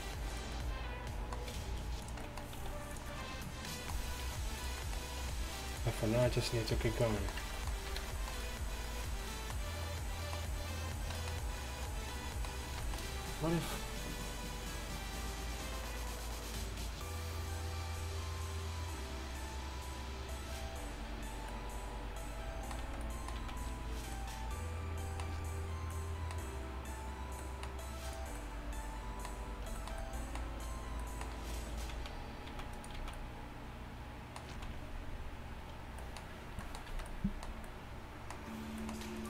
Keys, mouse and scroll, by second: 1.6 g, 2.6 s, 4.3 g, 5.3 r, 5.7 g, 6.8 g, 7.5 Tab, 7.5 g, 7.5 r, 8.0 a, 23.1 z, 23.5 z, 32.0 z, 32.5 z, 33.0 z, 34.6 z, 36.5 z, 36.9 z.